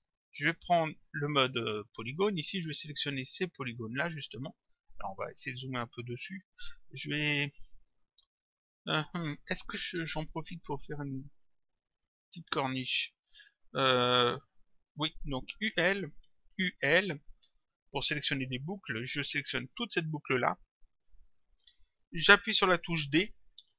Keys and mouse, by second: 0.5 click, 16.3 u, 20.4 click, 23.6 d.